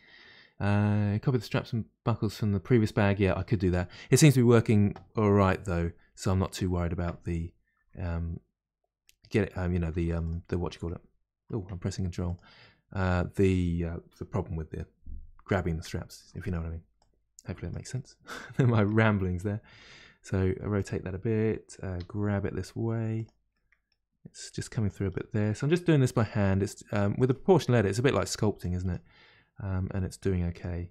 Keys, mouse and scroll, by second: 8.2-9.0 scroll up 2, 9.0 middle click, 10.1 click, 10.2 click, 11.7 Tab, 12.3 click, 15.7 Tab, 16.3 shift+middle click, 16.9 click, 17.7 click, 17.9-19.8 middle drag, 19.8 r, 23.5 middle click, 24.2-24.8 scroll up 2, 24.8 click, 25.4 middle click, 26.0 g, 27.6-28.6 scroll down 1, 28.6 click, 29.7 g.